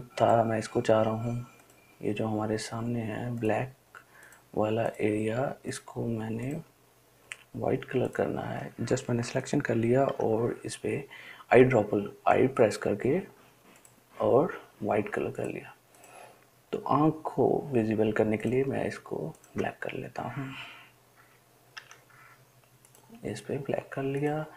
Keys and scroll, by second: 10.3 i, 22.0 i.